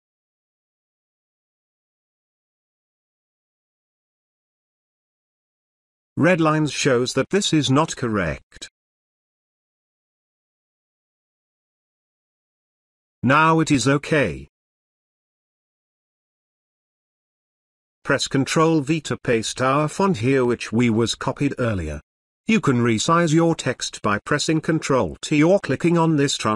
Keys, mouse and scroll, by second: 5.0-7.5 drag, 11.2-13.7 drag, 18.8 ctrl+Caps_Lock, 19.3 ctrl+v.